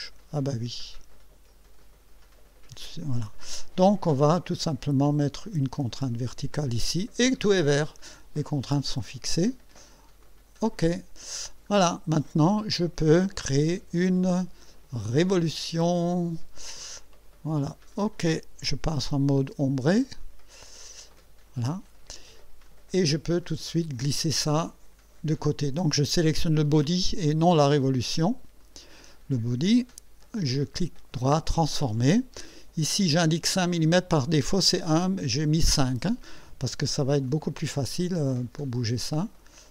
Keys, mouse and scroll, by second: 1.8-3.0 drag, 3.1 click, 4.6 click, 6.3 click, 7.3-7.7 scroll down 2, 7.9 scroll down 2, 8.4-9.4 right drag, 10.2 click, 11.5 scroll down 2, 12.2-13.0 right drag, 15.3 click, 17.9 click, 20.2 click, 21.0 click, 22.7-23.7 drag, 28.6 click, 30.5 right click, 31.6 click, 34.6 click, 37.3 click, 39.5-39.7 drag.